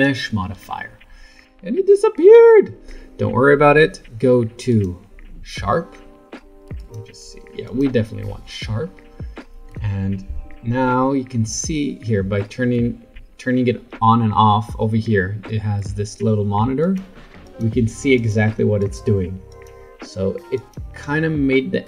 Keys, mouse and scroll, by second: 4.7 click, 6.8 click, 7.6 click, 9.7 Tab, 10.3 Tab, 16.8 click, 17.4 click, 18.1 click, 18.8 click, 19.5 click, 20.5 click.